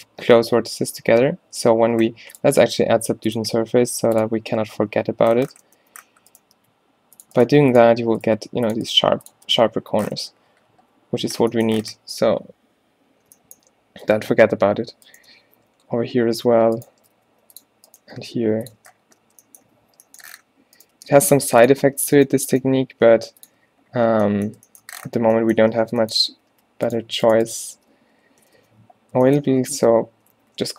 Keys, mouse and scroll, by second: 0.5 z, 1.1 z, 2.0 Tab, 5.0 z, 5.5 Tab, 6.0 z, 6.6 g, 7.5 g, 8.6 g, 9.1 g, 9.4 Tab, 11.3 Tab, 12.0 z, 15.6 g, 17.0 shift+Tab, 17.2 g, 18.1 g, 18.8 Tab, 19.3 Tab, 19.7 a, 19.9 a, 20.9 g, 22.8 g, 23.7 Tab, 24.2 Tab, 26.0 z, 26.4 a, 26.6 a, 27.0 click, 28.0-30.6 typing.